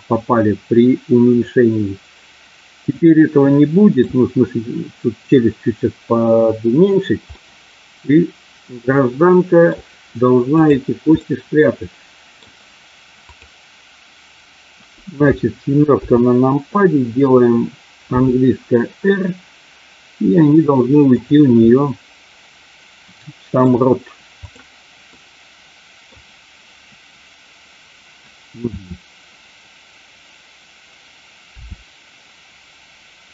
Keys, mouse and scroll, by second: 3.1 middle click, 7.2-9.6 middle drag, 10.5 click, 11.2-12.4 middle drag, 15.9 KP_7, 18.0 r, 21.6-23.6 middle drag, 25.0-26.0 middle drag, 31.5 r.